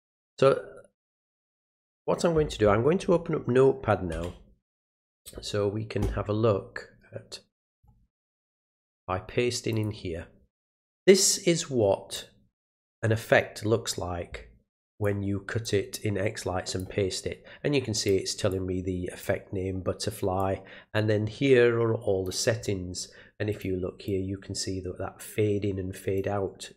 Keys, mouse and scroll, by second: 0.9 click, 7.6 click, 7.7 click, 8.2 click, 8.8 right click, 9.7 click, 11.3 click, 14.9 click, 15.6-16.8 drag, 18.0 click, 18.5 click, 20.4-22.2 drag, 23.5 click, 24.1-26.2 drag.